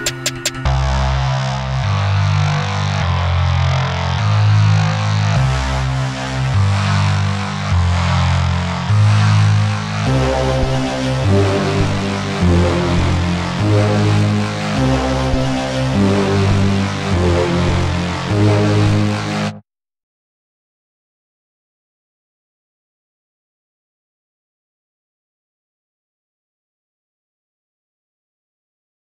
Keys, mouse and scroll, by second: 2.8-5.5 scroll down 1, 8.9 click, 11.3 click, 14.0-14.3 drag, 16.5-17.3 scroll down 1, 18.7-20.6 drag, 22.6-24.6 drag, 24.6-26.6 scroll down 1.